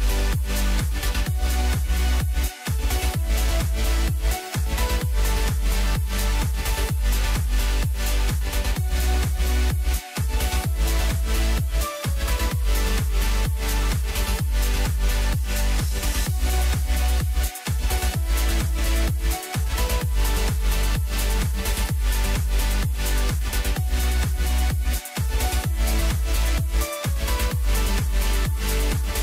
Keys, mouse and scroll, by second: 1.4-2.7 scroll down 4, 2.7-3.9 drag, 3.9-4.9 scroll down 2, 4.9-6.0 drag, 6.0-7.4 scroll up 7, 7.4-8.5 drag, 9.6-11.2 drag, 17.5-18.6 drag, 19.9-21.5 drag, 26.6-27.0 scroll up 2, 27.0-27.5 scroll down 2, 27.5-27.9 scroll up 2, 27.9 Tab.